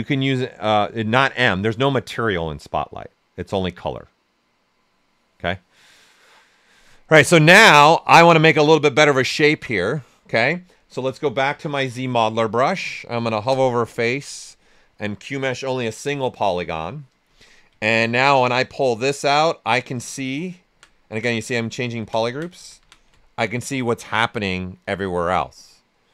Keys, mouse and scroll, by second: 7.2 right click, 7.2 typing, 10.9-12.2 typing, 12.4 right click, 13.5 space, 17.8 ctrl+right click, 18.7-23.7 drag, 18.7 typing, 23.7-26.1 right drag.